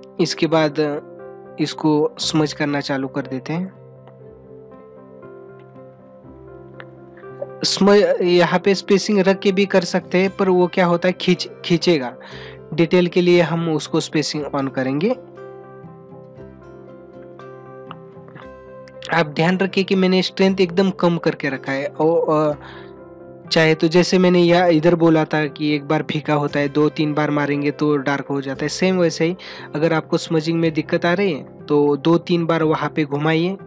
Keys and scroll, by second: 18.0 ctrl+=.